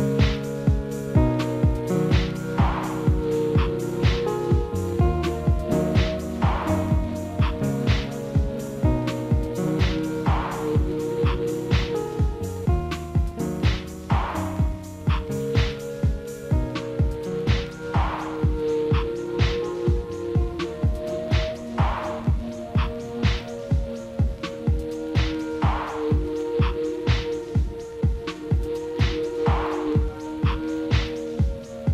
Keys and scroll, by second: 0.2 F4, 8.0 alt+w, 31.5 alt+w.